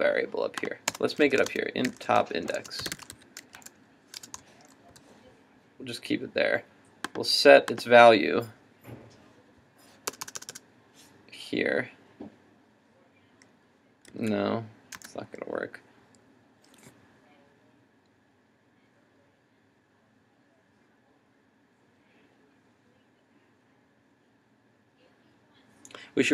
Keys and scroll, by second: 14.1 super+z.